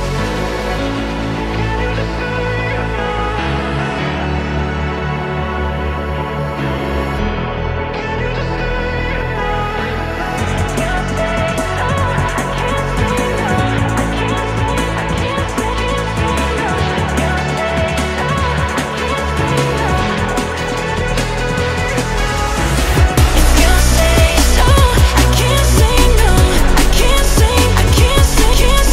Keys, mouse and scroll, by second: 0.4 g, 2.0 click, 3.1 alt+z, 3.3 click, 3.7 alt+z, 4.3 g, 8.1 Tab, 8.8 click, 9.6 r, 12.8 click, 13.2 scroll up 1, 13.2-13.6 scroll down 1, 13.6 click, 13.9-14.3 scroll down 1, 14.3-14.7 shift+middle drag, 14.7-15.4 scroll down 2, 15.4-16.1 shift+middle drag, 16.1 click, 16.6-17.1 middle drag, 17.1 Tab, 17.4 middle click, 18.3 alt+click, 18.7-19.7 middle drag, 19.7 KP_1, 20.2 Tab, 20.6 shift+middle click, 21.1 Tab, 21.7 alt+click, 22.5 g, 24.5 Tab, 25.0-27.4 shift+middle drag, 27.4 shift+click, 28.7 shift+d.